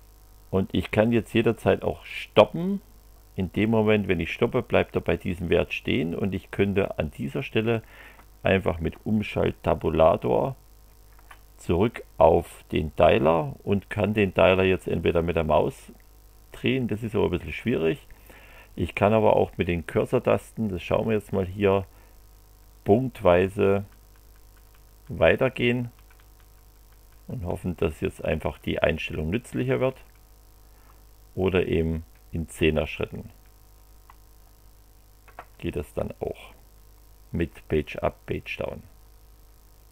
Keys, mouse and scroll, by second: 2.1 click, 10.2 shift+Tab, 21.0 Up, 31.0 Right, 35.8 Page_Up, 38.0 Page_Down.